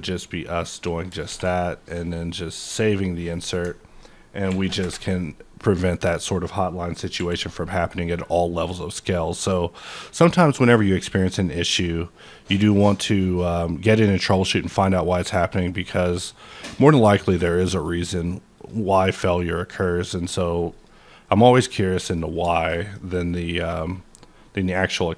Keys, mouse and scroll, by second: 0.6 shift+click, 1.2 a, 3.2 middle click, 4.5 ctrl+n, 4.8 Return, 6.1 middle click, 6.4 scroll down 1, 7.1 n, 8.0 click, 8.9 click, 9.7 click, 10.3 click, 11.3 click, 12.6-15.7 drag, 15.7 click, 17.2 click, 17.7 click, 18.5 click, 20.7 click, 22.0 middle click, 22.1 scroll down 1, 22.2 scroll, 22.2 scroll up 2, 22.5 shift+middle click, 23.6 click, 24.4-24.7 scroll down 2, 24.7 scroll down 4, 25.0-25.1 scroll up 3.